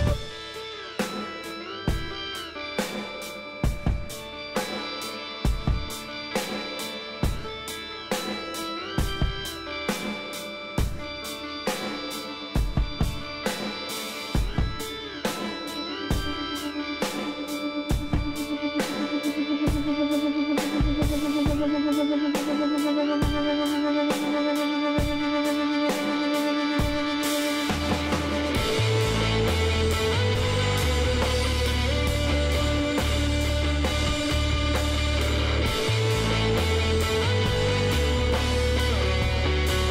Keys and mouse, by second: 0.8-6.6 middle drag, 7.0 click, 7.3 Tab, 7.4-8.7 middle drag, 9.3-10.7 middle drag, 11.0 middle click, 14.2 e, 16.6 s, 19.1 click, 19.5-20.8 middle drag, 20.8 KP_Decimal, 21.6-23.3 middle drag, 23.3 s, 27.0-31.2 middle drag, 28.3 e, 31.5-38.0 middle drag, 38.2 e.